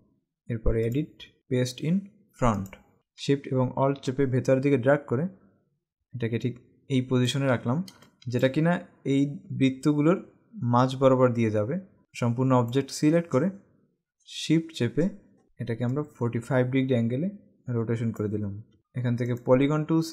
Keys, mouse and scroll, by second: 1.1 click, 2.7 click, 3.1 ctrl+z, 4.1 alt+shift+click, 8.0 space, 12.0 click, 15.9 click, 18.8 click, 19.3 right click.